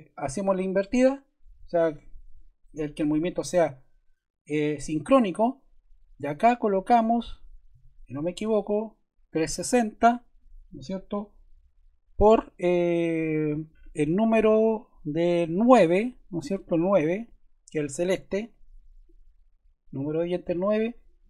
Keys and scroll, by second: 7.5-8.8 typing, 20.4 8.